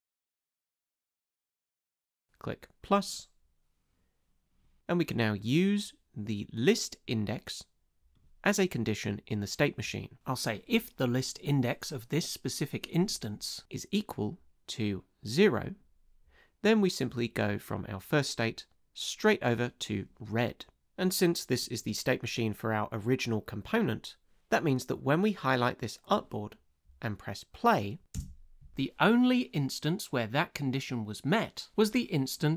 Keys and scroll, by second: 28.1 space.